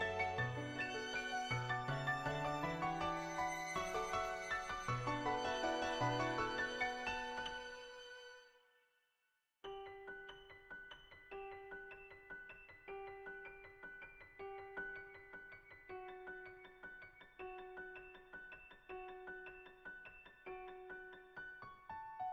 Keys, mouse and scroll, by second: 0.9 ], 1.1-3.3 drag, 3.5-6.8 drag, 7.2 ctrl+z, 7.4 [, 7.6 click, 8.1 click, 13.4 ], 13.7 click, 13.7 ], 14.0 click, 14.3 click, 14.9-18.4 drag, 18.9-19.8 [, 19.8 ], 19.9 ], 20.0 click, 20.6 ctrl+z, 21.0 [, 21.7 click.